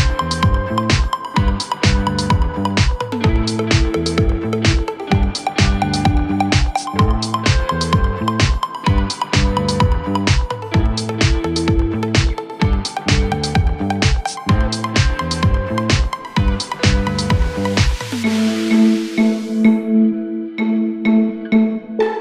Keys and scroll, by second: 15.8 typing, 18.0-18.7 typing.